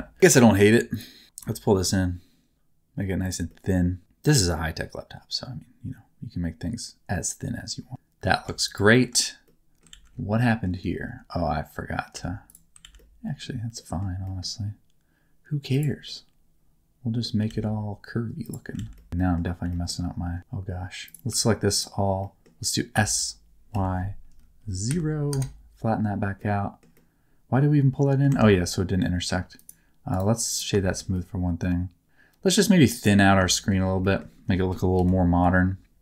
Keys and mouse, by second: 0.2 2, 0.9 shift+click, 1.4 g, 1.6 middle click, 3.2 click, 3.5-8.2 middle drag, 8.4 Tab, 9.0 Tab, 9.4 middle click, 9.9 alt+z, 10.4 middle click, 12.1 1, 12.8 alt+z, 13.0 middle click, 13.7 middle click, 14.1 g, 15.7 click, 16.0-17.2 middle drag, 17.5 alt+z, 18.4 click, 18.8 alt+z, 18.9 middle click, 19.2 middle click, 19.6 g, 20.4 ctrl+z, 21.0 click, 22.2 middle click, 22.9 s, 23.7 y, 24.9 KP_0, 25.3 KP_Enter, 26.4 middle click, 26.9-28.2 middle drag, 28.3 Tab, 29.0 middle click, 29.5 click, 30.2 click, 30.8 shift+middle click, 31.1 middle click, 32.0 click, 33.5 shift+middle click, 34.9 KP_1, 35.4 KP_3.